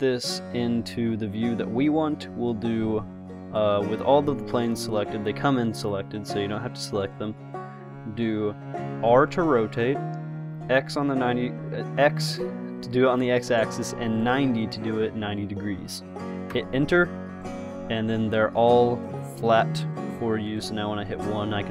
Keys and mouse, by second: 5.8-7.2 middle drag, 9.4 r, 19.0 click, 19.7-20.8 middle drag, 20.8 KP_1.